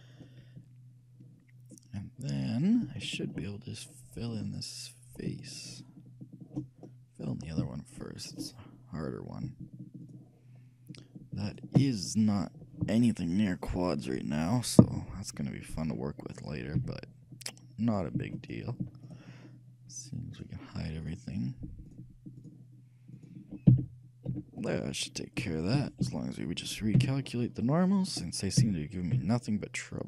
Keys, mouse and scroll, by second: 1.5-1.8 scroll down 1, 3.1-5.1 shift+middle drag, 4.6 shift+click, 5.1 shift+right click, 12.0-14.0 shift+middle drag, 12.0-13.4 shift+right drag, 16.9 f, 18.0-24.9 right drag, 23.8 f, 24.4 a, 24.7 middle click, 25.5 a, 25.9 a, 26.1 a, 26.9 middle click, 27.1 t, 28.2-30.0 drag, 28.8 t, 29.2 t.